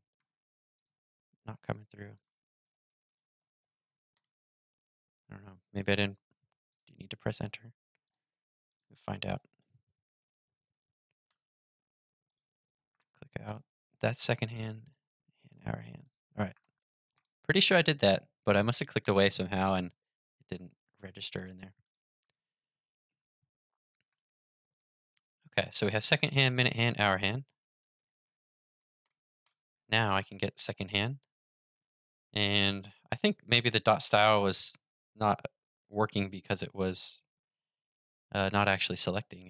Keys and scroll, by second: 21.9 super+r.